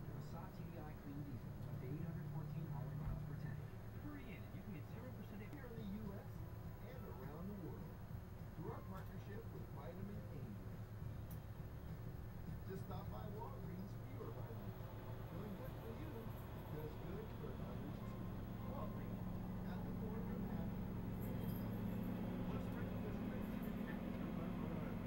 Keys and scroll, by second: 4.3 '.